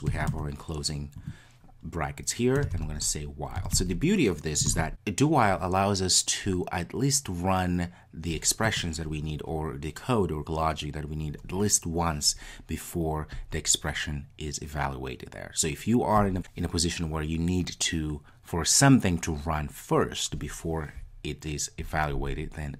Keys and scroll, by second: 2.8 Return.